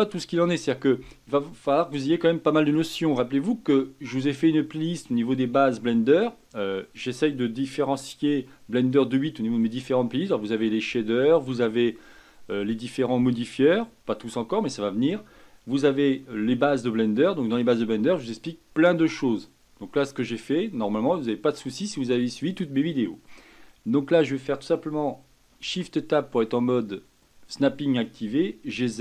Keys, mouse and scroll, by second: 25.6 shift+Tab, 28.3 g.